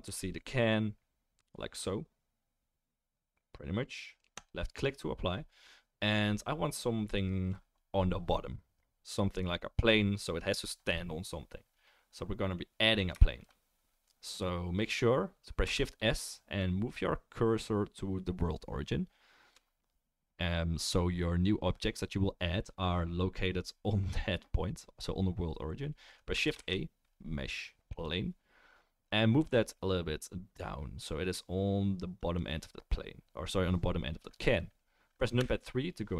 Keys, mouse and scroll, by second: 6.6-13.7 middle drag, 13.7-21.8 right drag, 15.7 shift+s, 26.5 shift+a, 29.4 g, 35.4 KP_3.